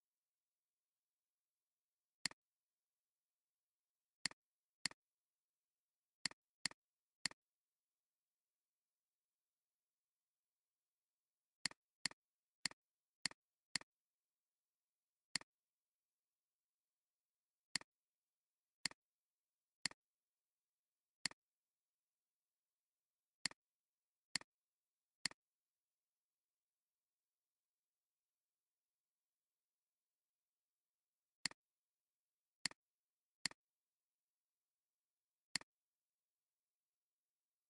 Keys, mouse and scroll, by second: 6.2 click, 6.7 double click, 12.0 click, 15.3 shift+click, 23.1-23.6 alt+scroll down 3, 23.3 space, 23.5 space, 23.8 space, 27.8 click, 29.1 click, 29.8 click, 30.8 click, 32.7 right click.